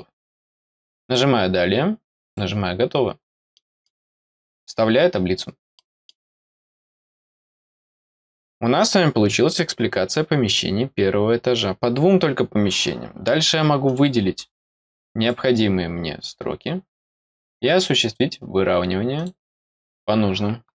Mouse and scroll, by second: 1.0 click, 2.2 click, 3.2 scroll down 1, 3.5 middle click, 4.5 click, 5.7 middle click, 13.8 click, 14.7 click, 16.9 click, 19.1 click.